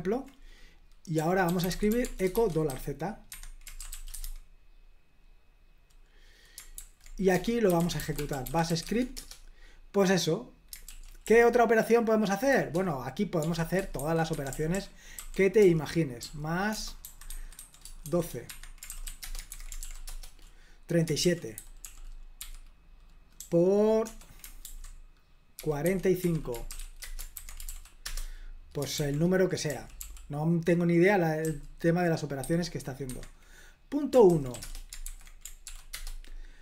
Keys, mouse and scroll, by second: 1.0-4.7 typing, 3.3 Escape, 6.8 super+h, 7.3-9.2 typing, 10.9 super+l, 11.3 k, 13.4-19.4 typing, 18.5 Escape, 19.5 super+h, 19.9 ctrl+p, 20.1 Return, 21.2 super+l, 21.6-22.4 typing, 24.7-27.2 typing, 26.2 Escape, 27.4 super+h, 27.7 ctrl+p, 28.1 Return, 29.0 super+l, 29.7-30.0 typing, 31.5-32.4 typing, 33.1 Escape, 34.1-35.1 typing, 35.7 ctrl+p, 36.0 Return.